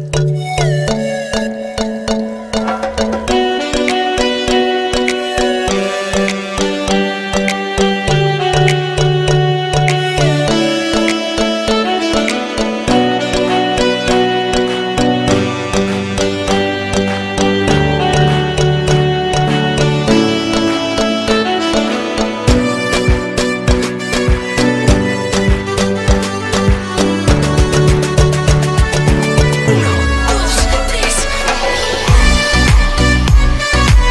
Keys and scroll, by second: 29.5 Delete, 30.5 F3, 30.7 Escape.